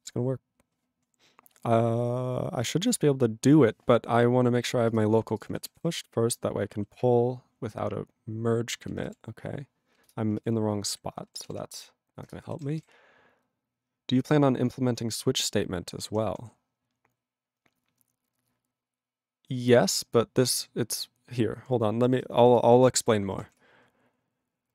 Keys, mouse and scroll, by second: 5.0 ctrl+=, 5.4 click, 5.4 click, 11.0 q, 12.3 Return.